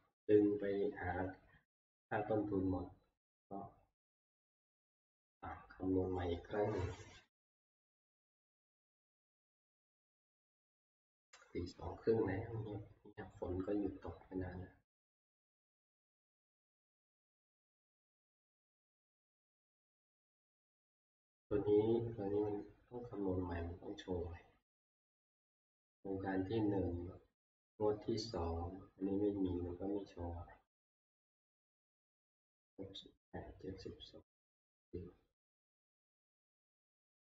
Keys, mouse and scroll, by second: 5.3-10.0 drag.